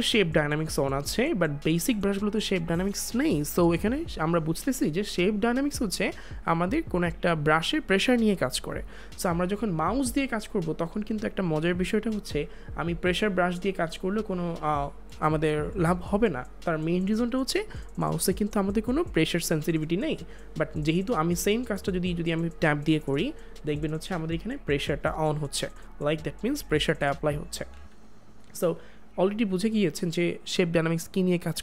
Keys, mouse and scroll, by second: 13.0 click, 27.6 click, 27.7 ctrl+z.